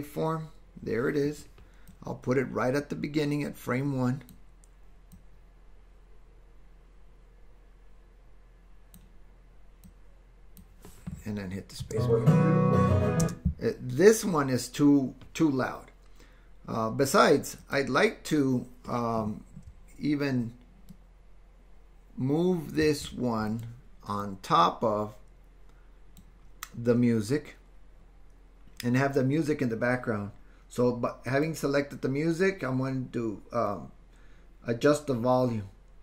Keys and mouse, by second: 1.9-4.4 drag, 5.2-9.0 drag, 10.0 click, 11.8 space, 13.3 space, 21.0-22.8 ctrl+drag, 22.9 space, 23.5 click, 24.2-26.3 drag, 31.3 click.